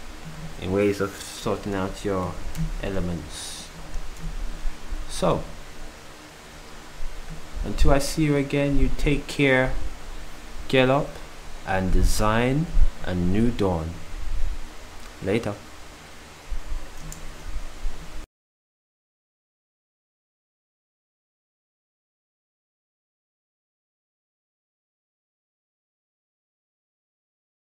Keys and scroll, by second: 17.4 ctrl+s.